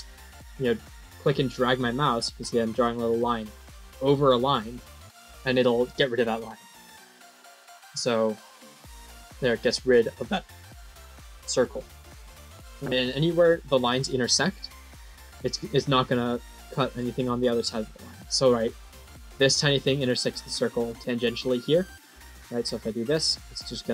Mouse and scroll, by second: 1.3-8.9 drag, 14.9-15.4 scroll down 5, 16.4 middle click, 17.3 scroll up 2, 22.1-22.9 drag.